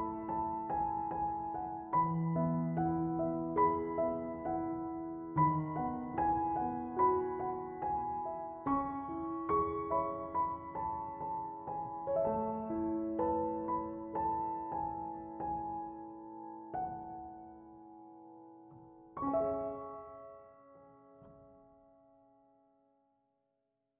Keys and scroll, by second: 6.3 1, 7.5 Return, 10.0 2, 10.8 Return.